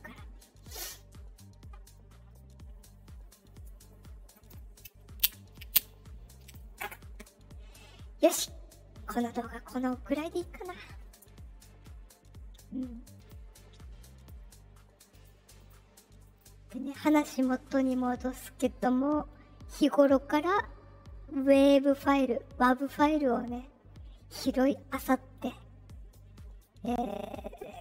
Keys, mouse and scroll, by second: 13.1 click, 15.1 click, 15.5 click, 16.2 click, 16.9 click.